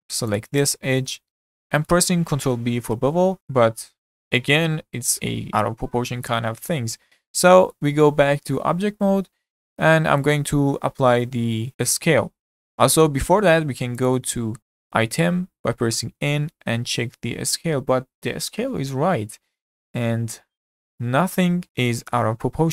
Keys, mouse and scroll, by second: 0.4 click, 0.7-1.2 scroll up 3, 1.2-2.4 shift+middle drag, 2.4 ctrl+b, 8.4 Tab, 8.9 scroll down 2, 9.1-11.7 middle drag, 11.9 ctrl+a, 14.0 click, 14.6 n.